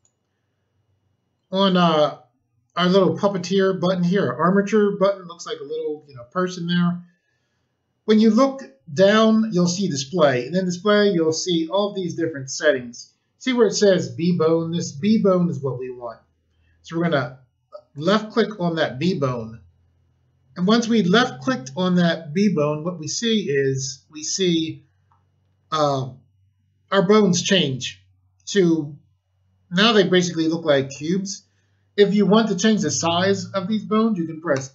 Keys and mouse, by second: 17.9 click, 34.5 a.